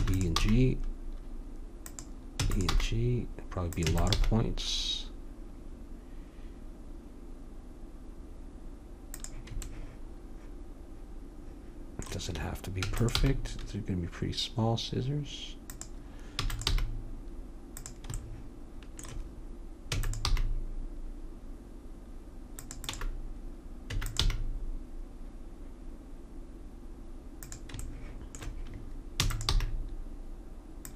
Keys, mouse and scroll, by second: 0.4 g, 2.4 e, 2.7 g, 4.0 e, 4.2 g, 12.9 e, 13.2 g, 16.4 e, 16.8 g, 20.0 e, 20.3 g, 22.8-24.6 drag, 22.9 e, 24.2 g, 29.2 e, 29.7 g.